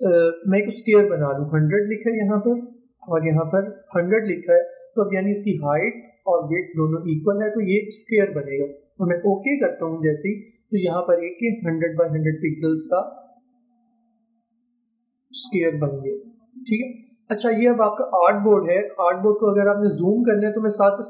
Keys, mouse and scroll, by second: 0.4 typing, 2.4 click, 3.3-4.0 typing, 12.2 click.